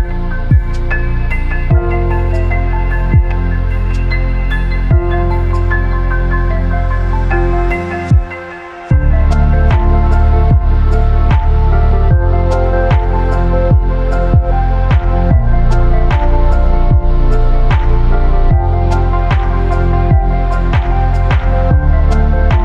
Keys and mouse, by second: 0.6-2.7 middle drag, 4.7-7.8 shift+middle drag, 11.2-12.1 middle drag, 13.5 middle click, 14.1 drag, 14.4-15.3 shift+middle drag, 15.3 click, 16.3 space, 19.2 space, 21.5 click.